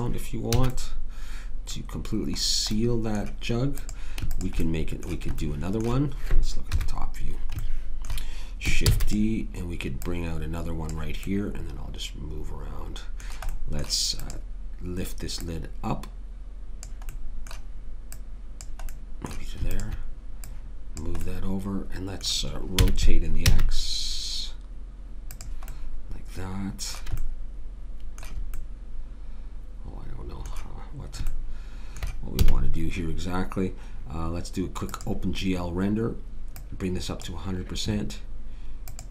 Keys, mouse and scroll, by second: 0.5 a, 3.9 click, 6.7 KP_7, 8.8 shift+d, 14.4 right click, 22.7 r, 31.2 middle click, 32.3 a, 33.5-34.9 middle drag.